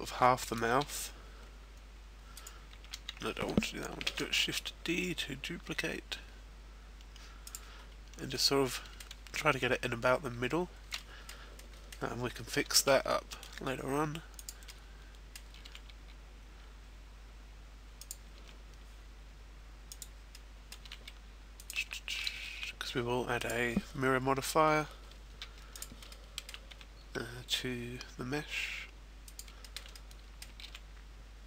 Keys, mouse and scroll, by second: 0.1 middle click, 0.9 e, 2.5 right click, 3.2 ctrl+z, 4.3 shift+d, 7.2 click, 7.6-8.2 scroll up 2, 8.2 middle click, 9.0-9.6 scroll up 1, 10.9 middle click, 11.6 middle click, 12.7 e, 14.4 click, 14.6 middle click, 15.8 e, 18.1 click, 18.5 e, 20.0 click, 20.3 middle click, 21.0 e, 21.7 click, 21.9 shift+middle click, 22.7 e, 23.5 click, 25.6 e, 25.8 click, 26.1 shift+middle click, 26.8 e, 29.4 click, 29.6 shift+middle click, 29.9 middle click, 30.8 e.